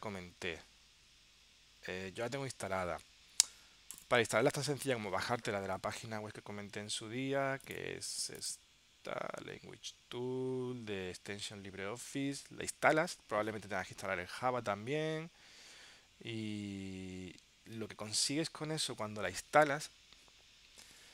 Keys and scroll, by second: 6.1 super+Tab, 12.5 super+Tab.